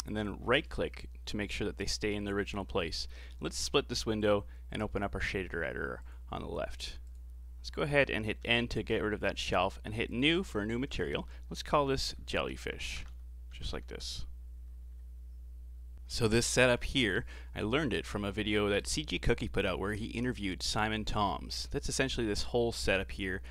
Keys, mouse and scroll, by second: 4.2-8.4 drag, 8.4 n, 10.1-12.2 drag, 12.2 l.